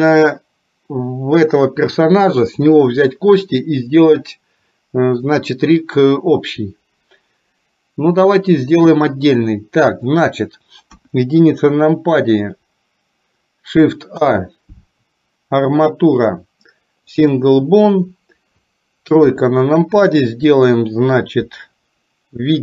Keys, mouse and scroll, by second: 10.9 KP_1, 14.2 shift+a, 19.3 KP_3.